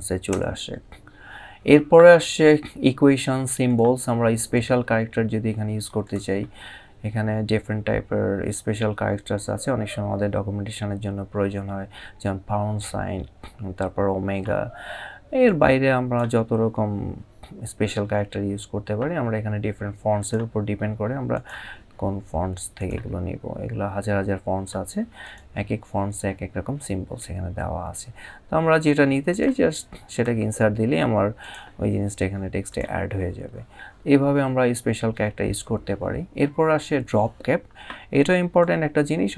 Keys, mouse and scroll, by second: 0.0 Return, 3.3 click, 5.7 click, 8.5-9.8 scroll down 1, 10.1-11.4 scroll down 1, 15.1 click, 19.9 click, 22.5 click, 29.0 click, 38.3 click.